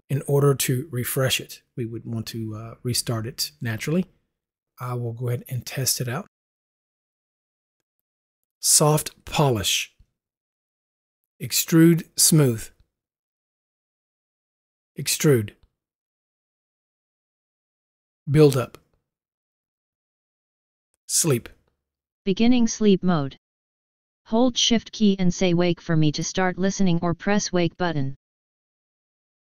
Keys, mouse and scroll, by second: 6.6 click, 10.5 u, 13.3 u, 16.2 u, 19.3 u.